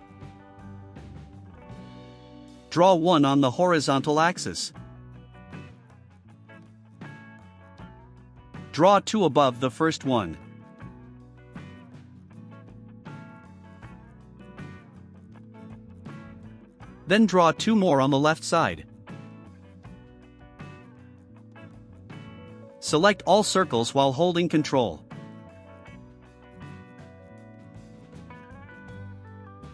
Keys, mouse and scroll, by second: 0.9 click, 1.6 middle click, 4.1 click, 6.4 click, 8.2 click, 10.9 click, 12.0 right click, 13.2 click, 15.0 click, 15.8 click, 17.7 click, 18.7 click, 20.2 click, 20.9 right click, 23.2 middle click, 25.3 click, 26.2 ctrl+click, 27.2 ctrl+click, 28.1 ctrl+click, 29.5 ctrl+click.